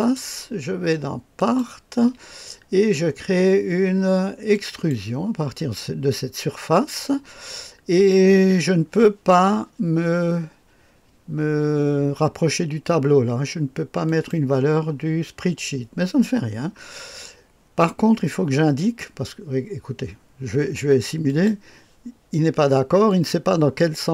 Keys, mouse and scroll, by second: 0.0 click, 1.4 click, 4.5 click, 14.1 click, 21.3 click, 23.1 click.